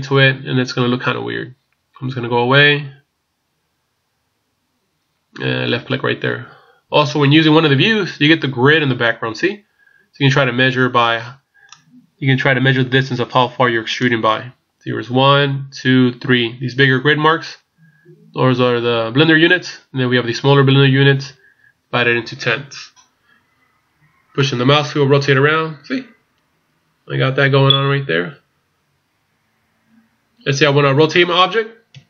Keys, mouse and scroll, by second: 11.7 click, 20.0-23.1 scroll up 3, 23.1 scroll down 2, 24.3 middle click, 24.3-24.7 scroll down 3, 31.9 KP_3.